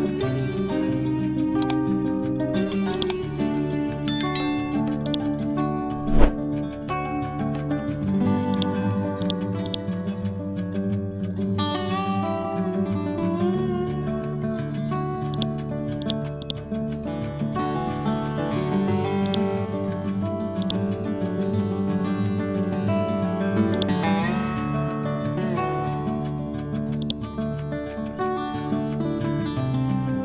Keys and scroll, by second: 7.7 ctrl+g, 12.6 Down.